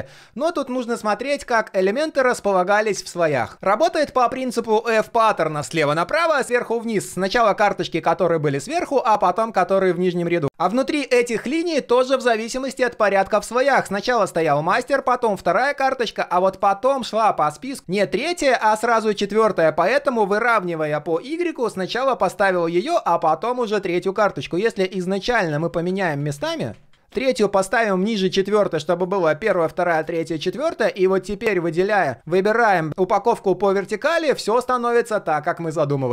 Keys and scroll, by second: 24.3 ctrl+z, 24.7 ctrl+z, 25.0 ctrl+z, 25.3 ctrl+z.